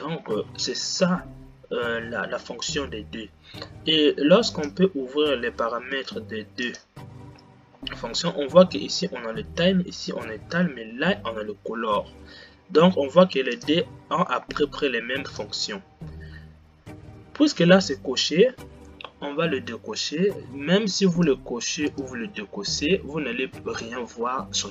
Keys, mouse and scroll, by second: 5.1-10.3 drag, 13.9-19.0 drag, 21.6 click, 22.2 click.